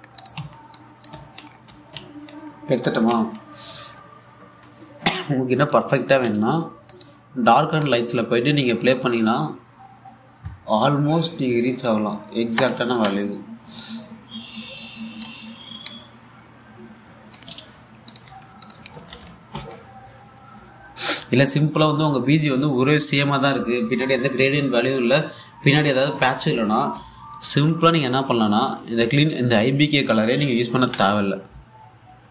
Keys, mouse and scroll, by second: 1.0-3.5 typing, 1.4 click, 2.2 scroll up 1, 3.2-3.5 scroll down 1, 4.4-5.2 scroll down 1, 7.5-18.3 drag, 18.3-18.7 scroll down 1, 18.7-20.7 typing, 18.7 click, 19.3 click, 28.0 alt+Num_Lock, 28.0 typing, 28.1 alt+click, 30.3 click, 31.5 d.